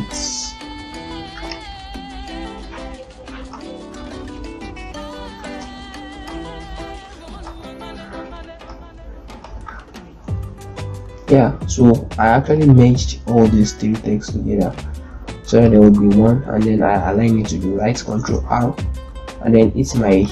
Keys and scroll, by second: 0.9 z, 5.3 ctrl+space, 9.9 ctrl+l, 13.0 ctrl+space, 15.7 ctrl+a, 18.1 space.